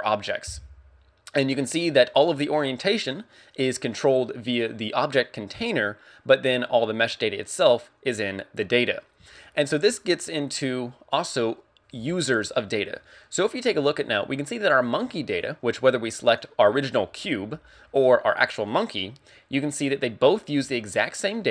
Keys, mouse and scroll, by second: 9.4 shift+middle click, 16.2 right click, 18.7 right click.